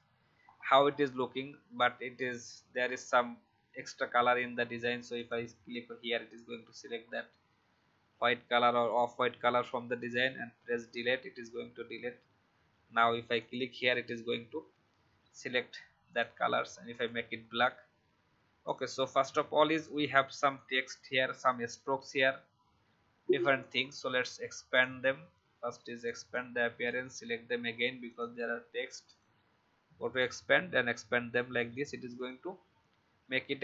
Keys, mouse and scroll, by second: 0.4-1.2 alt+scroll up 1, 2.1 click, 2.8 alt+scroll up 1, 5.1 click, 10.5 Delete, 11.9 alt+scroll down 1, 13.3 click, 14.6 alt+scroll down 1, 16.0 click, 18.1 v, 18.6 click, 19.1 alt+scroll down 1, 19.8-21.2 drag, 23.6-33.6 drag.